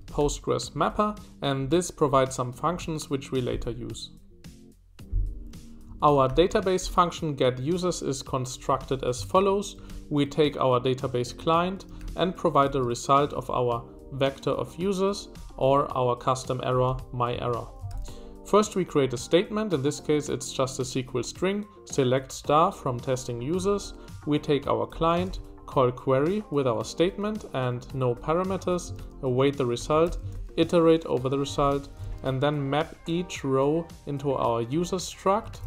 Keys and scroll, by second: 0.0-0.7 typing, 5.6-7.3 typing, 8.9-13.2 typing, 15.4-17.9 typing, 23.5 Escape, 23.8 typing, 25.2 shift+v, 28.4 Escape, 28.6 typing, 29.8 typing, 31.5 shift+v, 35.4 Escape.